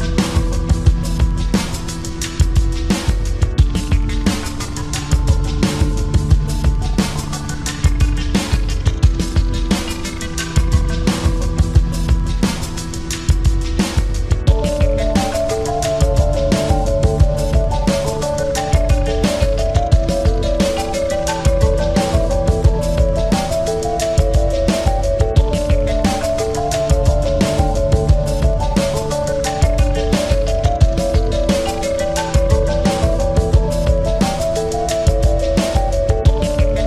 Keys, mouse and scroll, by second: 0.1 click, 0.3 s, 2.1 click, 3.3 click, 3.9-5.5 middle drag, 5.5 KP_1, 6.6 e, 8.2-9.4 drag, 8.6 s, 9.7 click, 10.7-11.7 drag, 10.7 e, 12.1-13.5 drag, 12.1 s, 14.1-17.6 drag, 14.5 e, 16.0 s, 17.7-20.4 drag, 19.4 KP_1, 20.4 e, 21.7-23.6 drag, 22.2 s, 25.6-30.2 drag, 30.8 e, 31.8-33.5 drag, 32.3 s, 34.0-36.8 drag.